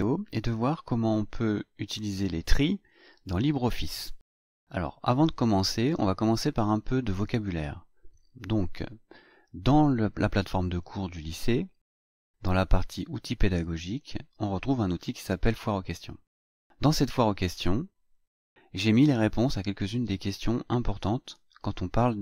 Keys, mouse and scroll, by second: 13.8 click, 17.4 click.